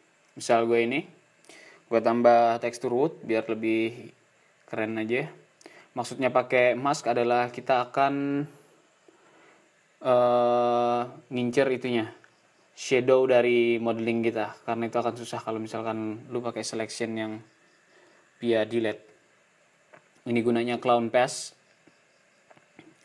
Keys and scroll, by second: 0.2 -.